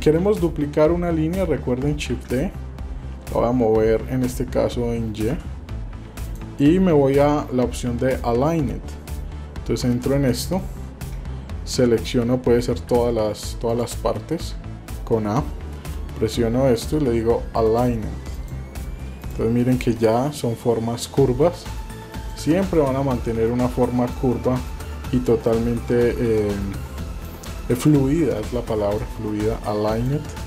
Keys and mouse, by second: 0.2 Tab, 2.1 shift+d, 9.8 Tab, 10.6 shift+middle click, 12.9 shift+a, 13.7 click, 14.3 a, 15.9 v, 19.2 click, 22.1 click, 23.2-24.2 drag, 24.7 click, 25.5-27.2 drag, 27.7 click, 28.4 click, 29.9 click.